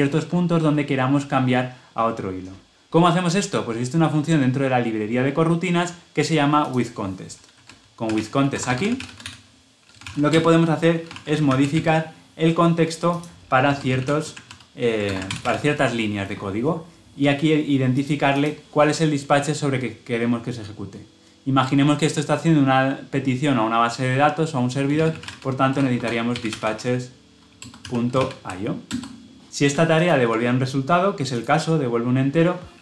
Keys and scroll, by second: 10.2 Return, 14.3 Return, 15.1 ctrl+alt+l, 15.3 ctrl+alt+o, 27.5 Return, 29.9 ctrl+b.